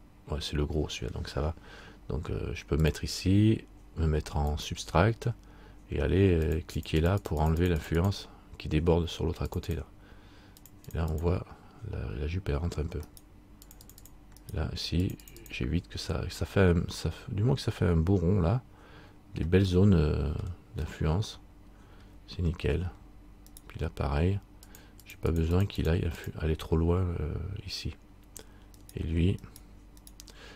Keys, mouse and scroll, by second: 3.0 click, 6.7-13.3 click, 13.3 right click, 13.8 click, 14.6 right click, 15.2 click, 19.9 middle click, 21.1 middle click, 22.7 scroll down 1, 23.7 right click, 24.9-26.0 click, 29.0 click, 29.0 right click.